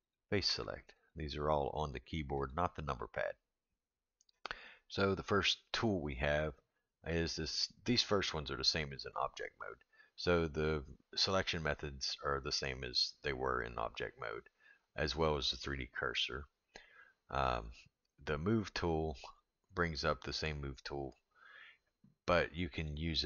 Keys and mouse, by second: 0.0 click, 1.0 click, 1.8 click, 2.3 click, 2.9 click, 22.8 click.